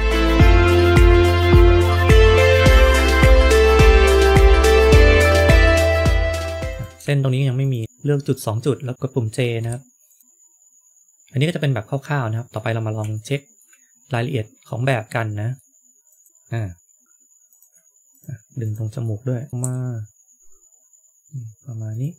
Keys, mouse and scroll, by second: 0.1 click, 0.9-1.3 scroll up 2, 0.9 KP_7, 2.3 scroll down 1, 2.5 shift+middle click, 3.2 middle click, 3.2 scroll up 2, 3.5 shift+middle click, 3.6 middle click, 4.0 click, 4.5 g, 5.5 middle click, 5.5-6.1 scroll up 3, 6.4 click, 6.4 shift+middle click, 7.5 click, 10.0 click, 13.1 shift+middle click, 14.0 middle click, 16.0 click, 16.3 g, 17.0 ctrl+z, 17.0 click, 17.4 click, 18.1 shift+click, 18.6 click, 18.9 middle click, 19.5 scroll up 6, 19.5 KP_1, 19.7 g.